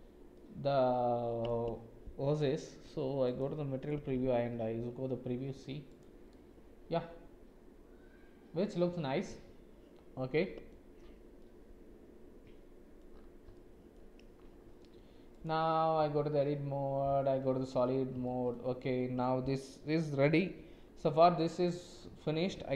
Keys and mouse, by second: 0.3-1.5 middle drag, 3.3 click, 5.9 click, 6.3-10.7 middle drag, 11.4-13.0 middle drag, 13.5 middle click, 15.3 click, 16.0 Tab, 17.1 z, 18.2 shift+middle click, 21.1 Tab.